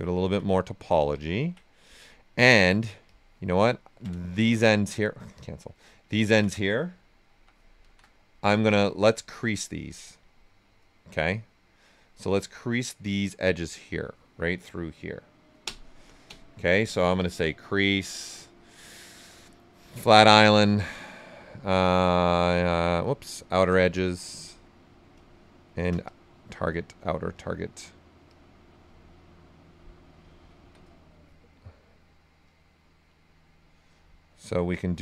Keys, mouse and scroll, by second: 0.1 ctrl+right click, 3.0 click, 3.4 right click, 4.3 shift+f, 5.3 click, 5.7 right click, 7.2 shift+f, 9.6 shift+d, 15.6 space, 17.4 click, 18.1 space, 19.7 click, 19.8 space, 23.2 click, 24.1 click, 25.1 space, 25.6 click, 26.0 click, 27.6 x, 28.2 click, 29.9 right click, 30.6 d, 32.4 click, 34.4 shift+d.